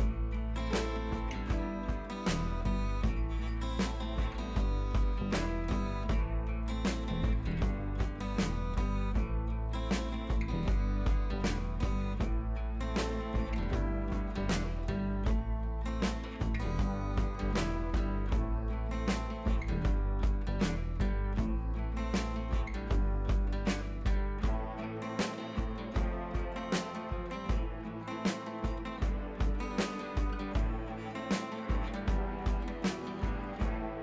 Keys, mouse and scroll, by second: 1.6 scroll down 1, 2.8 shift+F4, 3.5-5.0 scroll down 1, 5.0-5.5 scroll down 2, 5.0 click, 5.5-6.1 scroll up 1, 6.1 click, 7.2-9.2 shift+drag, 9.2 Up, 11.6 click, 14.1 ctrl+c, 14.7 ctrl+v, 16.5 ctrl+Page_Down, 17.2 click, 17.7-18.8 scroll up 1, 18.8 click, 19.6 scroll up 1, 20.8 scroll down 1, 21.6-23.5 drag, 24.2 scroll up 1, 24.8 click, 27.1-27.7 scroll down 1, 27.7 scroll up 1, 28.5-30.2 drag, 30.2 scroll down 1, 30.7 scroll up 1, 31.4-33.0 drag, 33.2 scroll down 1, 33.7 scroll up 1.